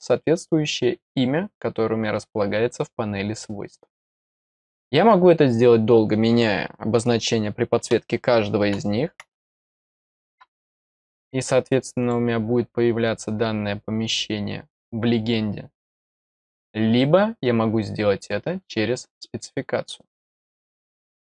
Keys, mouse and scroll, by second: 12.0 click, 17.0 middle click, 17.2 middle click, 20.5-21.3 drag.